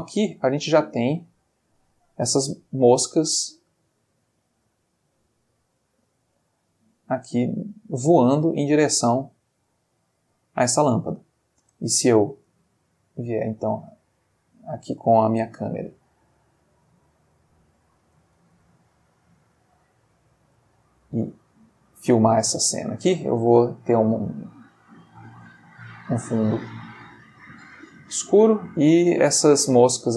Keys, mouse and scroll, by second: 1.2-2.1 middle drag, 11.6 space, 12.5 click, 12.9-13.7 middle drag, 13.8 middle click, 15.4 g, 16.7 click, 17.5 click, 18.3 g, 20.2 click, 22.8-23.3 drag, 25.2 click, 26.0 click, 27.0-28.3 drag.